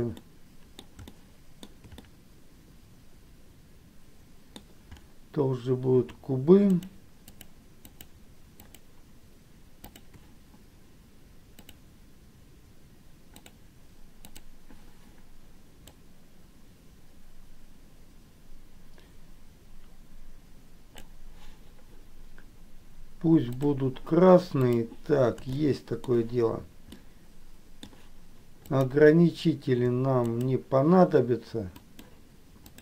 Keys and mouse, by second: 0.3 middle click, 1.3 shift+middle click, 2.2-4.7 middle drag, 7.4 shift+click, 8.0 shift+click, 8.8 shift+click, 10.0 shift+click, 11.8-13.9 drag, 14.8 click, 16.1-21.2 drag, 23.8 click, 25.7 shift+middle click, 27.2 middle click, 28.9 click, 30.5 shift+click, 32.0 shift+click.